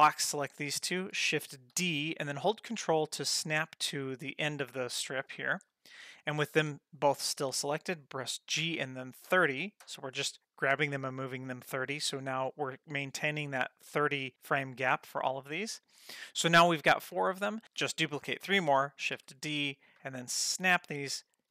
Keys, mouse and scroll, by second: 0.6 middle click, 1.8 shift+d, 8.6 g, 15.0-15.9 middle drag, 17.3 click, 19.2 shift+d, 21.2 middle click.